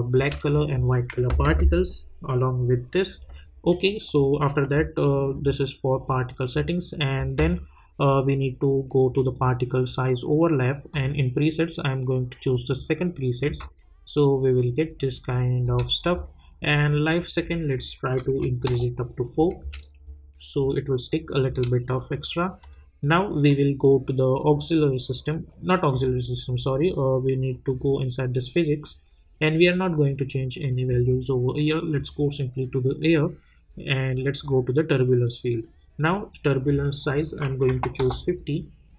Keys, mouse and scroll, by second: 0.1 space, 4.0 click, 5.3-7.4 scroll down 1, 9.2 click, 13.4 space, 15.6 space, 16.1-17.7 scroll up 1, 17.7 click, 18.7 Return, 19.6 space, 21.5 space, 22.6 click, 28.8-30.7 scroll down 1, 31.9 click, 33.0-34.0 scroll down 1, 34.3 click, 37.0 click, 38.0 Return.